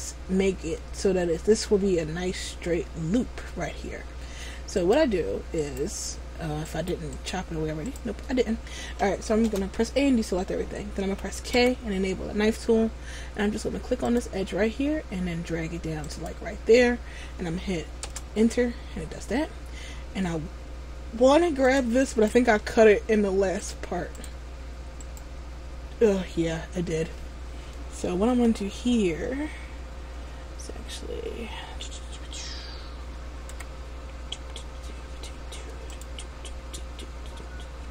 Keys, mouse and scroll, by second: 4.9 right click, 9.7 a, 11.7 k, 21.9 click, 22.3 right click, 23.7 click, 25.3 right click, 28.5 Tab, 33.7 k.